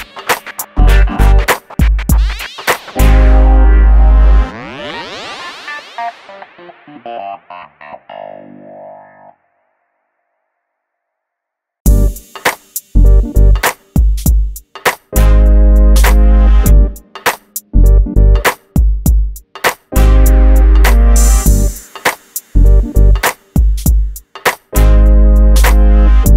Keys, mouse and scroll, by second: 1.0 KP_1, 1.1 KP_0, 2.2 click, 2.5 middle click, 3.2-3.6 scroll up 1, 3.6 click, 3.9-5.7 middle drag, 5.7-6.0 scroll up 1, 6.5 middle click, 6.9-7.2 scroll up 1, 7.9 typing, 10.6-11.1 scroll down 1, 13.9 middle click, 15.0 shift+middle click, 15.7-16.5 scroll up 1, 16.8 F2, 17.4 scroll up 1, 17.5 middle click, 18.3 scroll up 1, 18.7 click, 19.9 shift+click, 20.3 middle click, 21.3-21.6 scroll up 1, 21.7 shift+click, 22.7 shift+g, 22.9 middle click, 24.1 scroll up 1, 24.4 middle click, 25.2 scroll up 1, 25.7 middle click.